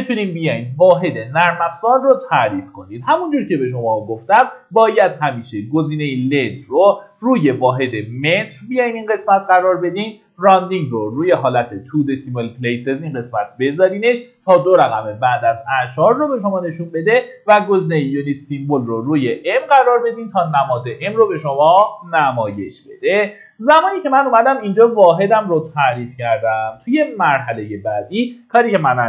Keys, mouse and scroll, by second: 6.2-11.3 drag, 23.3 middle click, 27.2 click.